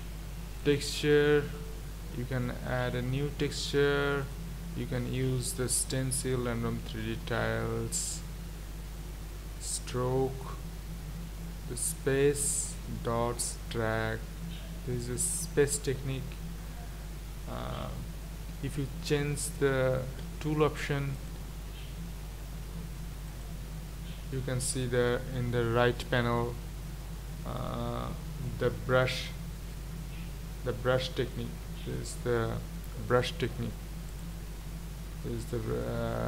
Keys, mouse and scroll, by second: 30.4-34.2 middle drag, 34.2-36.2 drag.